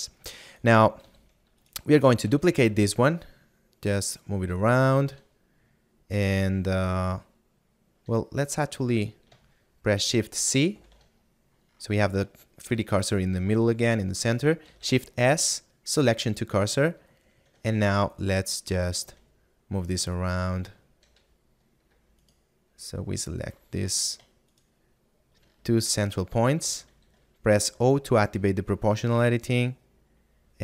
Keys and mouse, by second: 6.9 middle click, 12.5 middle click, 16.9 middle click, 18.3 middle click, 20.8 shift+middle click, 22.3 alt+right click, 25.1 shift+middle click, 30.0 click.